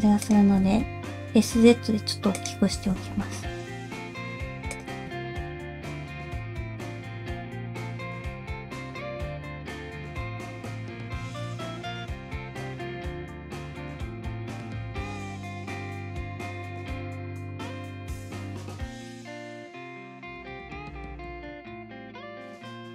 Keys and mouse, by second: 0.5 s, 2.8 g, 5.1 shift+middle click, 5.5 click, 5.6 middle click, 5.8 g, 6.5 click, 6.6 g, 7.2 click, 7.9 click, 8.1 g, 8.7 g, 9.2 click, 9.3 middle click, 10.0 click, 10.1 g, 10.6 click, 10.7 g, 11.1 middle click, 11.8 click, 12.4 f, 14.2 click, 14.5 click, 14.6 g, 15.2 click, 15.3 g, 15.9 click, 16.6 click, 16.8 g, 17.7 middle click, 18.6 middle click, 19.0 click, 19.1 middle click, 19.5 g, 20.5 shift+middle click, 20.9 click, 21.5 alt+click, 21.7 middle click, 21.9 g.